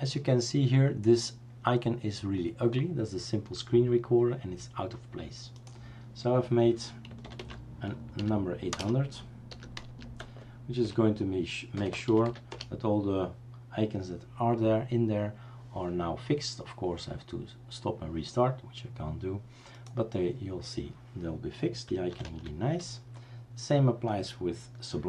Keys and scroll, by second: 7.4-10.3 typing, 10.9 Return, 11.5-12.7 typing, 22.3 typing.